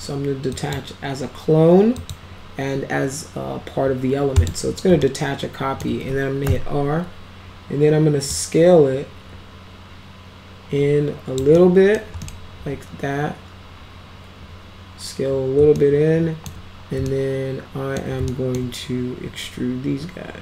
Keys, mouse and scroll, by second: 0.5 click, 2.0 click, 4.4 click, 5.1 alt+middle click, 6.5 r, 8.3-11.4 drag, 11.6 middle click, 12.3 middle click, 15.8 alt+middle click, 17.1-18.0 alt+middle drag, 18.3 alt+middle drag.